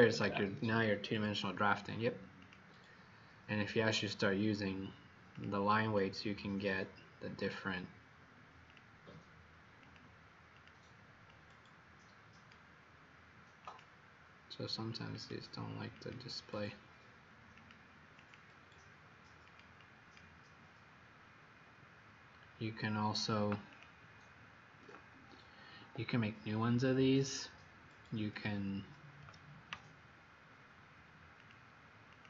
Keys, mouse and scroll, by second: 2.3 click, 6.0 click, 7.3 click, 18.1 click, 19.5 click, 19.8 click, 23.6 click, 25.7 Escape, 31.4 click.